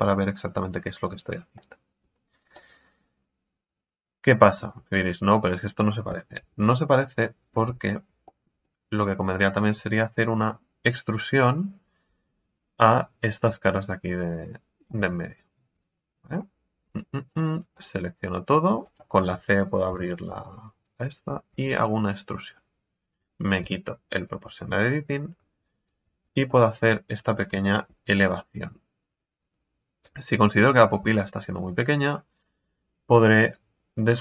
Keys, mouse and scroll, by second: 0.6-1.2 scroll up 1, 1.2 Tab, 1.5-2.2 middle drag, 2.2-2.5 scroll down 3, 2.5-5.6 middle drag, 6.1 KP_1, 6.4 Tab, 6.9-7.4 scroll up 2, 7.4 right click, 8.2-9.5 shift+middle drag, 9.5-10.5 scroll up 1, 13.8 click, 14.8 right click, 15.9 middle click, 16.8 c, 19.9 KP_3, 21.5 e, 22.3 click, 23.6 o, 24.2-26.0 drag, 26.0 scroll down 1, 26.2 Tab, 26.4-31.0 middle drag, 31.0 Tab, 31.3-31.7 scroll up 4, 31.7 right click, 33.4 click, 34.1 right click.